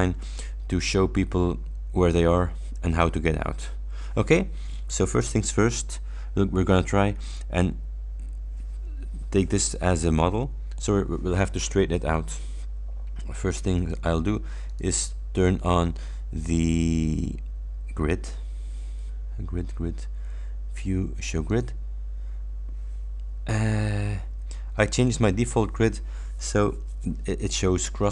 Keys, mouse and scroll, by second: 14.8 click, 21.5 click, 23.9-24.4 ctrl+scroll up 4.